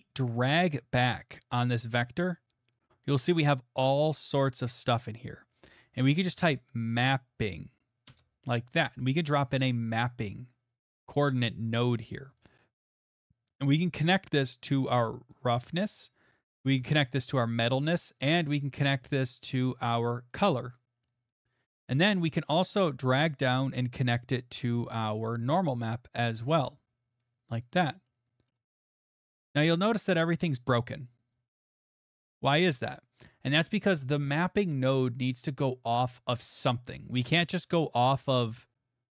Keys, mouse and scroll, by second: 1.8 click, 3.7 middle click, 3.8 middle click, 4.0 middle click, 4.2 middle click, 4.4 middle click, 4.8 right click, 4.8 scroll, 6.2-6.5 scroll, 6.2-6.9 typing, 8.1 Return, 10.0 click, 12.1 scroll, 14.3 right click, 14.3 middle click, 15.3 click, 20.3 right click, 21.0 click, 21.0 middle click, 21.5 middle click, 26.9 click, 28.1 middle click, 28.5 middle click, 29.3 middle click, 29.6 middle click, 29.7 middle click, 31.0 middle click, 34.7 click, 35.3 click, 36.5 click, 37.2 click.